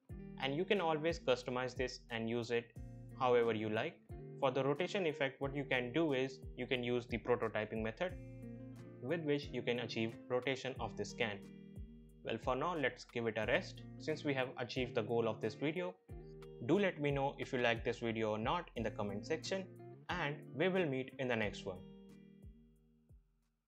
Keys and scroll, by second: 14.4 F11.